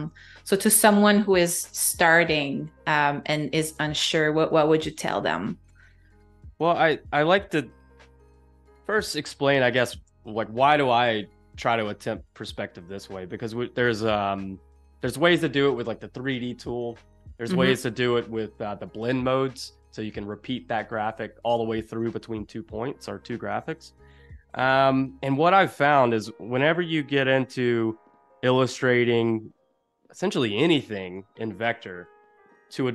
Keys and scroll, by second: 0.9 super+-, 2.2 space, 3.0 z, 4.4 a, 8.0 super+-, 9.1 space, 24.4 super+=, 24.7 space, 25.8 z, 26.6 a, 31.4 super+-, 32.4 space.